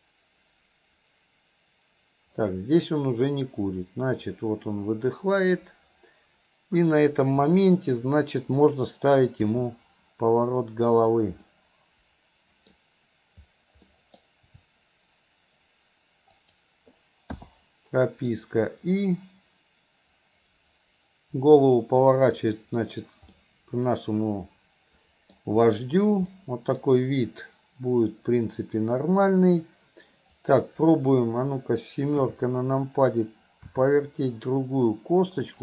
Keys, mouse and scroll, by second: 9.4 r, 11.5-12.4 middle drag, 12.5 middle drag, 13.9 middle click, 14.2-14.6 scroll down 1, 14.6 r, 18.4-22.7 drag, 23.4-25.6 middle drag, 26.4 middle click, 30.5 click, 33.7 r.